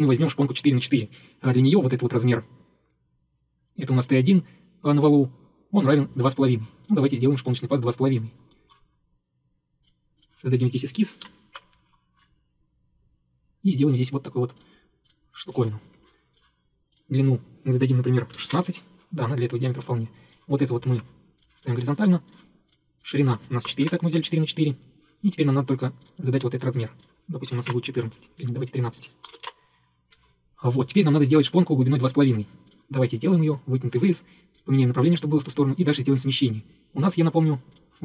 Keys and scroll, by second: 11.3 ctrl+8, 15.9 Escape, 18.1-19.1 typing, 23.7 typing, 23.9 Return, 27.3-30.0 typing, 30.1 Escape.